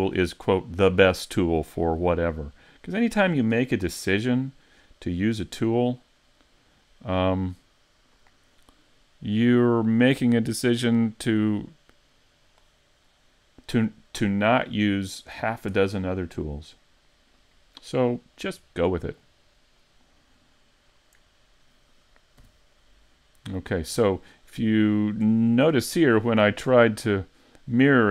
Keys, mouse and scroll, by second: 3.0 middle click, 4.8-5.7 scroll down 1, 5.7 scroll down 2, 10.6 click, 13.1 middle click, 16.7 click, 22.4 n, 24.2 middle click, 24.9-25.3 scroll down 3, 25.3 shift+middle click, 25.8 middle click, 26.4-27.4 scroll up 2, 26.9 shift+middle click.